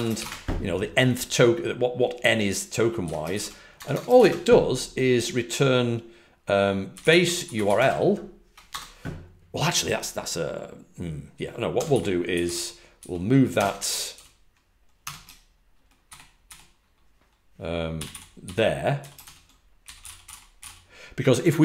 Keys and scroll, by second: 3.8 typing, 6.7-8.6 typing, 11.8-15.0 typing, 17.6-21.0 typing.